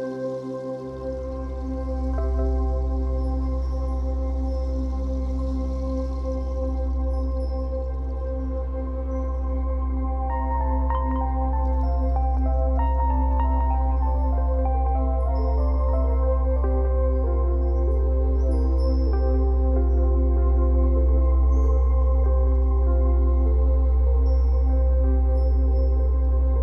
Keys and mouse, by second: 0.0-1.4 typing, 3.4 z, 5.3 z, 6.2 -, 6.6 space, 6.8 click, 7.1 space, 9.0 click, 13.2 click, 15.4 click, 16.5 space, 16.7 click, 17.0 space, 17.5 =, 24.8 ctrl+z.